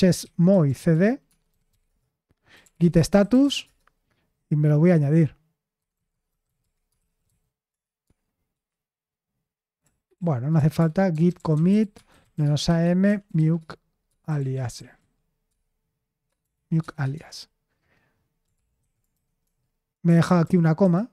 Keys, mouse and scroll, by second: 0.0-4.0 typing, 5.5-8.0 typing, 9.8-17.4 typing, 18.5 ctrl+p, 18.8 ctrl+a, 19.1 alt+f, 19.4 alt+f, 20.1 Left, 20.2 Left, 20.4 Left, 20.8 m.